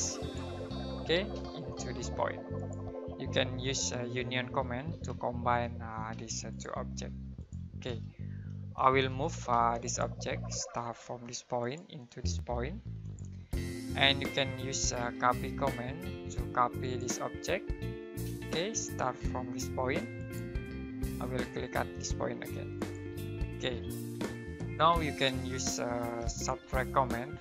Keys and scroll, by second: 1.1 space, 4.6-6.1 typing, 7.8 space, 9.5 typing, 10.7 space, 15.0-16.4 typing, 18.2 space, 23.9 Escape, 26.2-27.4 typing.